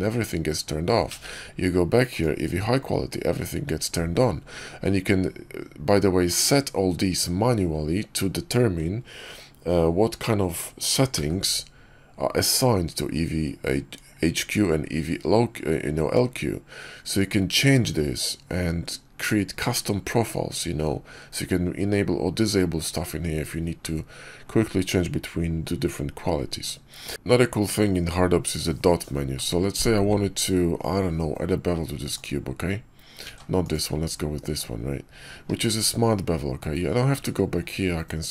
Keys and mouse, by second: 1.0 alt+v, 11.0 alt+v, 27.1 x, 27.1 shift+a, 29.2 alt+w, 32.0 click, 33.1 ctrl+z, 35.4 q, 36.9 q.